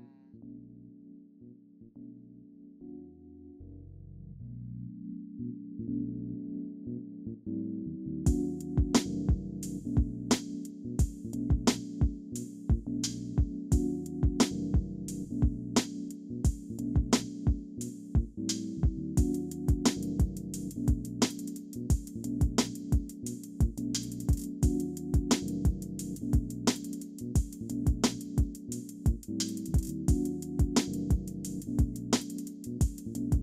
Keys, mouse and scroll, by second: 1.9 alt+click, 2.4 alt+middle click, 3.6 scroll up 1, 6.5 alt+middle click, 7.6 ctrl+click, 8.7 ctrl+click, 9.0 scroll down 1, 9.6 alt+middle click, 10.3 alt+scroll up 1, 10.4 ctrl+click, 10.6 ctrl+click, 10.7 shift+click, 10.8 alt+middle click, 11.0 alt+middle click, 11.4 ctrl+click, 11.5 ctrl+click, 11.9 ctrl+click, 12.0 shift+click, 12.1 scroll up 1, 12.2 ctrl+click, 12.3 alt+middle click, 12.4 ctrl+click, 12.8 alt+middle click, 12.9 ctrl+click, 13.0 shift+click, 13.1 ctrl+click, 13.4 shift+click, 13.5 ctrl+scroll up 1, 13.6 ctrl+z, 13.7 ctrl+click, 14.0 alt+middle click, 14.2 ctrl+click, 14.5 alt+middle click, 15.8 ctrl+click, 17.1 ctrl+click, 17.5 alt+middle click, 18.7 ctrl+click, 19.6 scroll down 1, 20.1 alt+middle click, 20.5 scroll down 1, 20.6 scroll up 1, 21.4 alt+middle click, 21.6 alt+scroll up 1, 22.1 alt+middle click, 22.3 alt+scroll up 1, 22.4 alt+middle click, 23.1 scroll down 1, 23.5 alt+middle click, 24.6-24.9 alt+scroll up 1, 25.1 alt+click, 26.5 alt+middle click, 27.4 alt+click, 28.6 scroll up 1, 28.9 alt+click, 30.4 scroll down 2, 30.7 alt+middle click, 32.5 shift+click, 33.0 scroll down 1.